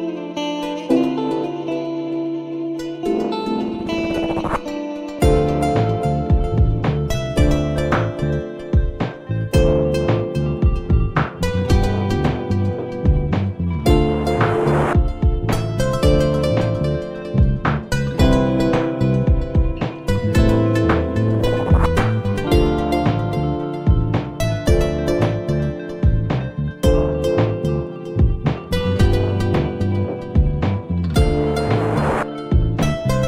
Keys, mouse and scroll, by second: 0.5 f, 4.5 Tab, 5.1-6.7 scroll up 2, 8.0-10.0 drag, 17.7-20.2 middle drag, 20.2 Tab, 21.7 middle click, 22.6 shift+click, 23.1-28.1 middle drag.